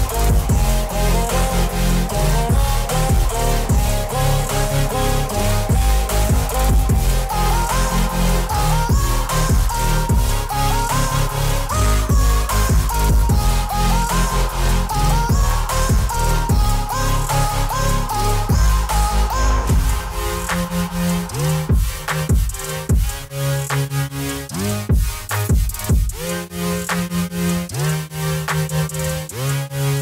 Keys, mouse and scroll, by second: 0.5 click, 0.6 Up, 3.8-4.9 scroll down 1, 5.6 scroll up 1, 6.3-8.4 scroll up 1, 8.5 click, 10.4 click, 11.4 click, 16.0 click, 18.0 click, 19.1 click, 20.0 click, 21.7 click, 22.7 click, 23.9 space, 24.1 click, 24.2 space, 24.6 click, 25.6 alt+click, 29.9 click.